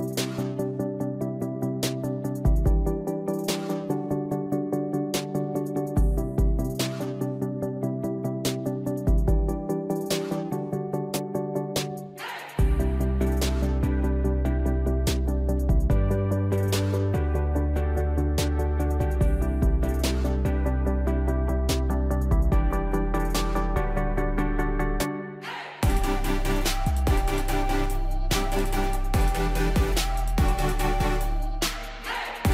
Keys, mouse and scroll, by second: 1.3 click, 4.0 alt+click, 21.9 click, 28.8 right click, 30.2-32.5 drag.